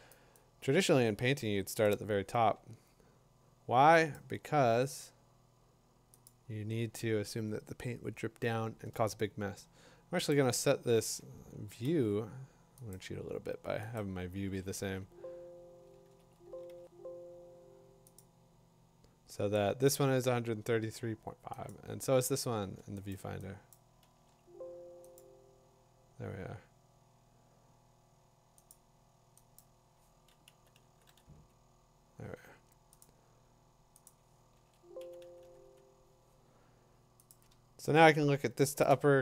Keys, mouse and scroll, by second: 0.0 click, 0.3 click, 0.4 click, 0.7 click, 0.8-1.1 click, 1.4-1.7 click, 1.8 click, 4.1 click, 6.3 click, 10.3 click, 11.0 ctrl+a, 11.8 ctrl+c, 12.9 click, 14.0 click, 14.5 ctrl+a, 14.8 ctrl+v, 16.0 ctrl+a, 16.7 ctrl+v, 18.2 click, 21.7 click, 23.1 click, 23.7 click, 24.1 ctrl+v, 25.2 click, 28.7 click, 29.6 click, 30.9 3, 31.1 3, 33.0 click, 33.6 typing, 34.1 click, 34.6 ctrl+a, 35.0-35.6 typing, 37.3-38.8 click, 38.1 click, 38.8 click.